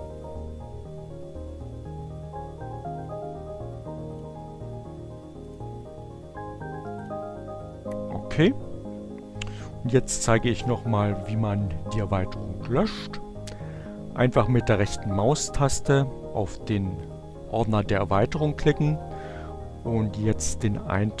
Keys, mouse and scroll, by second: 4.8-5.9 drag, 7.0 click, 14.8 right click, 20.2 click.